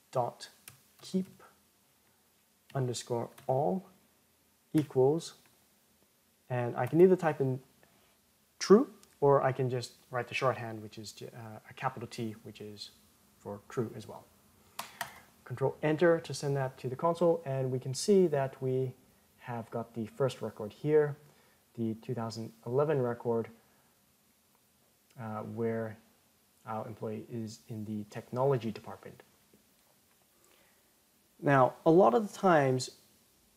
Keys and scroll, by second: 14.7 ctrl+Return.